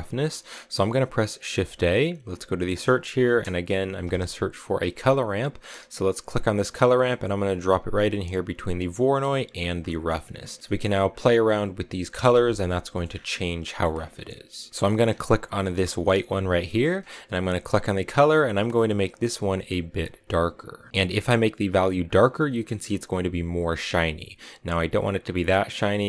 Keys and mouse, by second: 1.4 shift+a, 10.0 click, 10.6 middle click, 11.0 click, 16.1 click, 25.0 click.